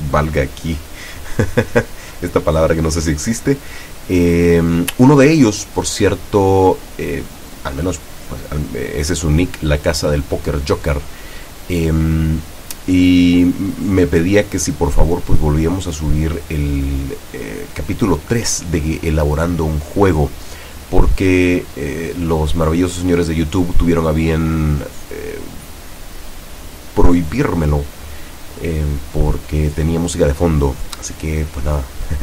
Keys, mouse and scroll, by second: 3.5 right click, 4.7 right click, 7.7 p, 17.4 Up, 24.1 Down.